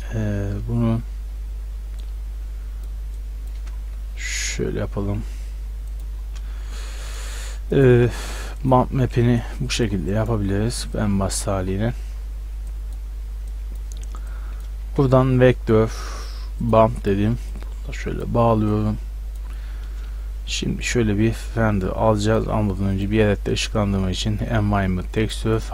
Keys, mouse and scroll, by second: 2.0-5.0 drag, 6.0-11.9 drag, 12.6-14.4 drag, 14.9 shift+a, 17.6-18.0 drag, 22.3-25.7 drag.